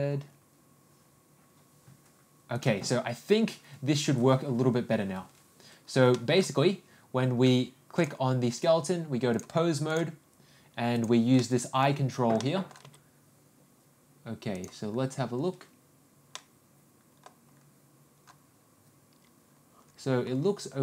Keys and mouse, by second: 6.1 middle click, 9.3-10.3 drag, 11.4 click, 11.4 middle click, 12.4 middle click, 13.1 g, 16.3-17.2 middle drag, 20.5 g.